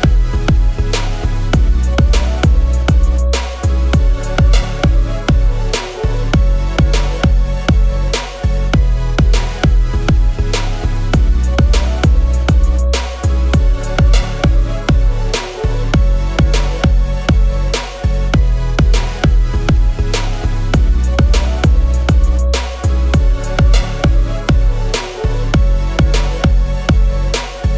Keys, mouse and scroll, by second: 2.0 alt+click, 5.9 shift+click, 22.3 alt+click, 27.3 alt+click.